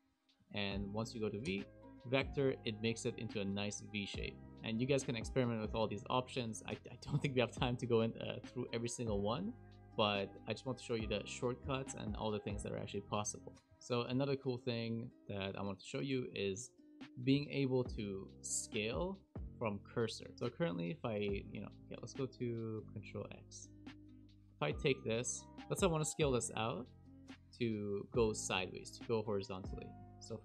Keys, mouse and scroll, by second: 0.3 click, 1.4 v, 13.7 click, 13.7 a, 14.0 a, 15.1-15.5 scroll down 6, 15.1 KP_Decimal, 15.5 shift+middle click, 16.0-16.3 scroll down 2, 16.6 shift+middle click, 20.3 click, 22.7 click, 22.9 click, 23.7-24.2 scroll down 3, 24.0 click, 24.3 shift+middle click, 25.2 click.